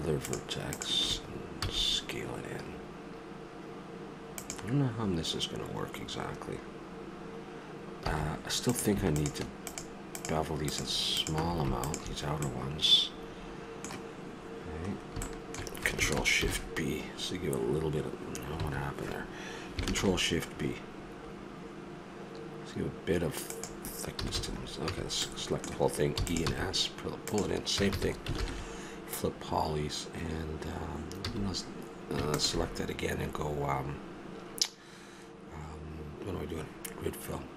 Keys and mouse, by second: 1.6 s, 8.1 a, 8.7-13.1 right drag, 13.1-16.1 middle drag, 19.9 ctrl+shift+b, 24.2 a, 24.3 a, 26.1 a, 26.1 e, 26.8 s, 27.8 a, 28.4 ctrl+n, 28.4 a, 31.2 a.